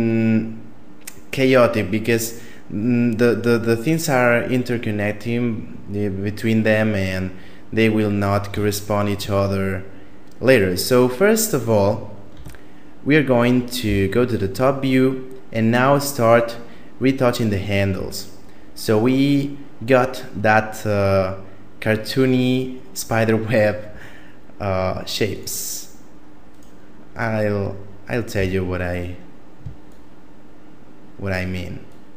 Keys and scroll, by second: 12.3 Tab, 13.8 KP_7, 28.4 a.